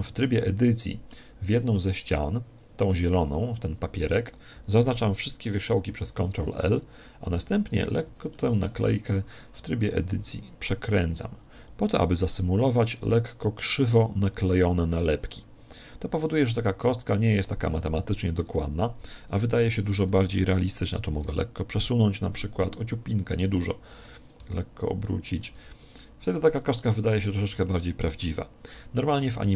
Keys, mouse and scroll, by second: 0.4-2.1 middle drag, 1.9 z, 5.6 ctrl+l, 7.3 KP_1, 8.4-10.1 middle drag, 10.3 r, 11.7 click, 12.3 Tab, 16.5 right click, 16.9 Tab, 17.7 a, 18.4 right click, 19.5 ctrl+l, 21.2 g, 22.2 click, 23.9 r, 25.3 click, 25.5 Tab, 26.8-28.5 middle drag.